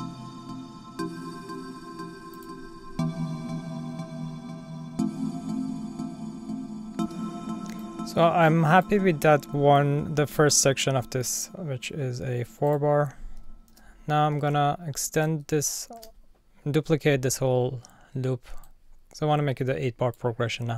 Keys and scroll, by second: 7.0 space, 13.7 super+d, 14.4 super+z, 16.0 super+d.